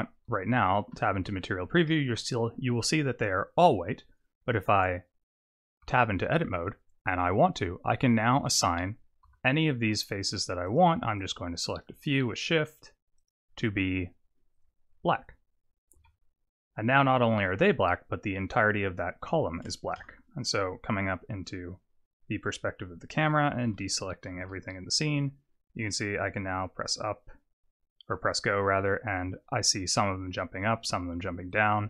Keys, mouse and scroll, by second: 0.3 z, 1.9 middle click, 3.5 click, 5.9 Tab, 9.2 3, 10.7 shift+click, 11.2 shift+click, 11.7 shift+click, 12.4 shift+click, 13.2 shift+click, 14.5 click, 15.2 click, 16.1 Tab, 20.0 KP_0, 23.7 alt+a, 24.4 alt+a, 26.0 click, 31.7 click.